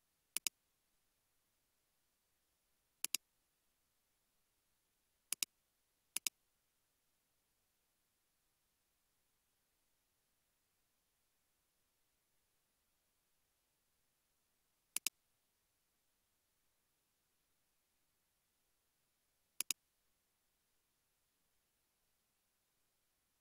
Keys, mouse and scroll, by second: 4.1 typing, 13.8-15.1 scroll down 1, 15.1 typing, 16.6 typing, 17.7 Return, 20.2 space.